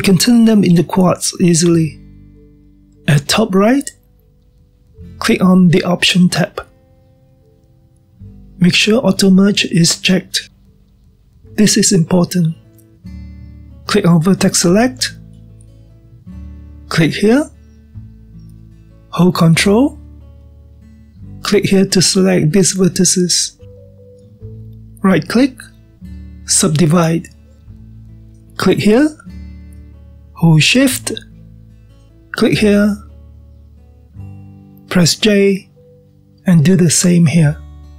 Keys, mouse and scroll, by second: 2.1 drag, 3.7 click, 7.6-10.7 drag, 16.6 click, 17.2-18.1 scroll down 1, 18.1-19.6 middle drag, 19.6 click, 20.0-22.0 middle drag, 22.0 ctrl+click, 22.8-23.9 middle drag, 23.9-26.1 scroll up 2, 26.1-28.1 right drag, 28.1-29.6 middle drag, 29.6 click, 32.9 shift+click, 35.7 j, 37.7 click.